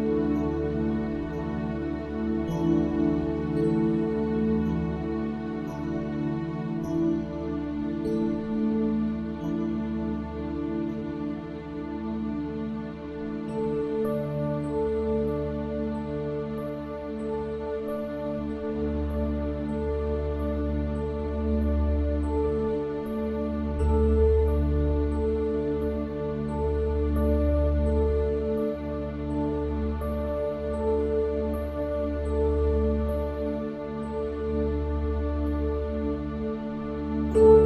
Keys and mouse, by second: 18.6 click.